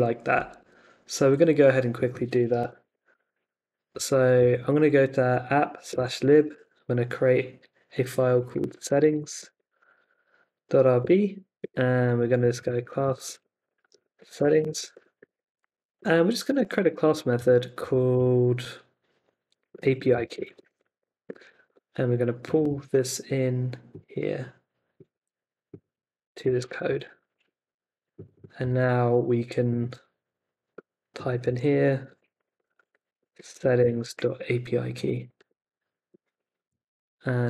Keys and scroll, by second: 0.5 super+Tab, 2.5 super+t, 2.8 ,, 3.1 shift+n, 3.9 Down, 4.4 Return, 4.9 Down, 5.9 Return, 6.2-7.0 typing, 8.1-10.3 typing, 11.0 Return, 11.9-18.1 typing, 19.3-21.4 typing, 21.6 Escape, 25.1 super+c, 26.6 super+v, 26.8 =, 27.3 super+s, 28.7 super+c, 31.4-33.4 typing, 33.5 super+v, 33.8 Escape, 34.1 super+s, 35.4 super+Tab.